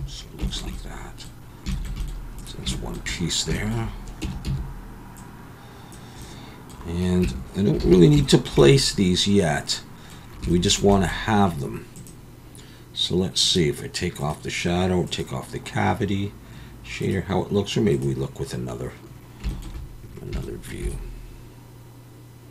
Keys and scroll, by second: 4.2 Tab, 4.4 a, 7.5 Tab, 7.9 alt+a.